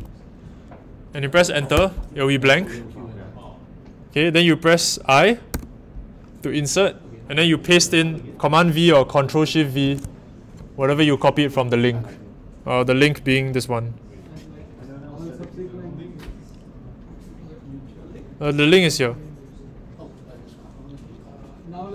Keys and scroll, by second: 1.7 Return, 5.5 i, 9.8 super+v.